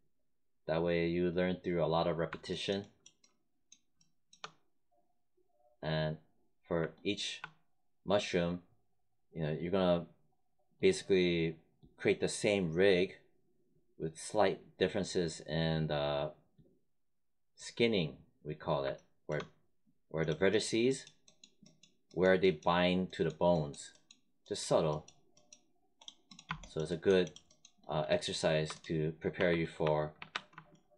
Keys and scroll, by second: 29.0-30.6 typing.